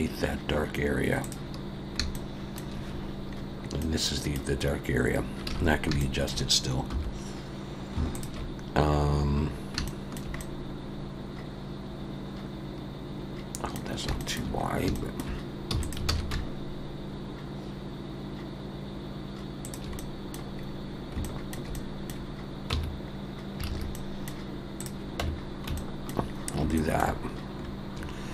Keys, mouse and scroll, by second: 2.1 shift+scroll up 1, 2.2 shift+middle click, 3.4-4.0 scroll up 2, 3.8 middle click, 4.9 scroll down 1, 5.5 alt+a, 5.7 scroll up 1, 6.0 shift+middle click, 6.9 3, 8.1 alt+shift+click, 8.9-9.9 scroll down 4, 9.9 shift+middle click, 10.4 middle click, 14.2 shift+middle click, 14.6 scroll up 2, 14.9 shift+middle click, 15.7 e, 16.1 alt+s, 20.0 middle click, 20.6-21.2 scroll up 2, 21.2 shift+middle click, 22.7 Tab, 23.0-23.6 scroll down 2, 23.7 alt+a, 23.9 middle click, 24.8 click, 25.2 Tab, 25.8 shift+middle click, 26.3 scroll up 2, 26.8 shift+middle click.